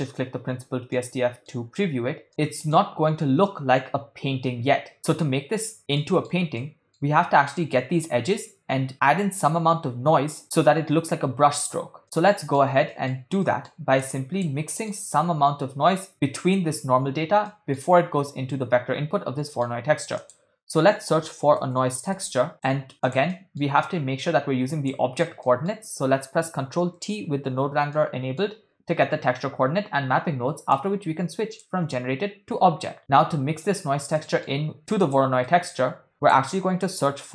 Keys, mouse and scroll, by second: 0.9 middle click, 2.3 middle click, 5.1-5.8 middle drag, 6.0-6.3 shift+middle drag, 6.7 ctrl+middle click, 12.0 ctrl+middle click, 12.2 middle click, 12.9 middle click, 13.5 ctrl+middle click, 14.0 click, 14.7 middle click, 17.5 middle click, 19.5 middle click, 20.0 shift+a, 23.3 middle click, 23.9-25.0 drag, 25.4 middle click, 27.0 ctrl+t, 27.9 middle click, 30.7-31.7 drag, 33.0 middle click, 33.7 click, 34.2 middle click, 35.1 click, 35.5 middle click, 36.1 shift+a.